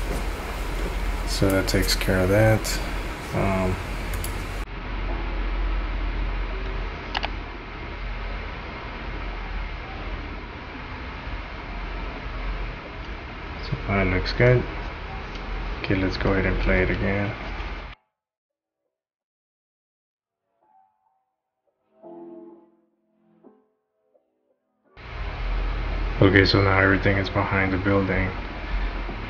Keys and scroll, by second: 14.4 shift+/, 17.4 space.